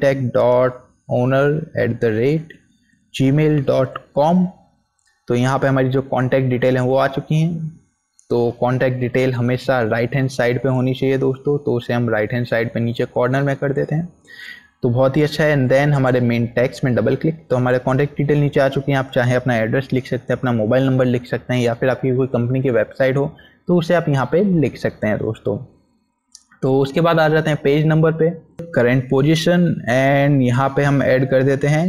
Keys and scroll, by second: 0.0-3.6 typing.